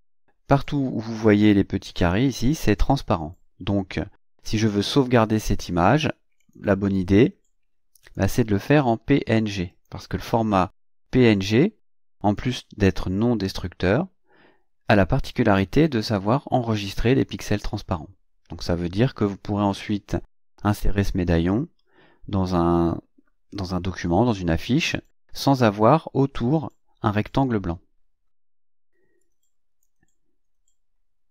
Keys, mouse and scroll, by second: 6.4 click, 8.0 click, 9.7 click, 12.4 click, 29.2 click.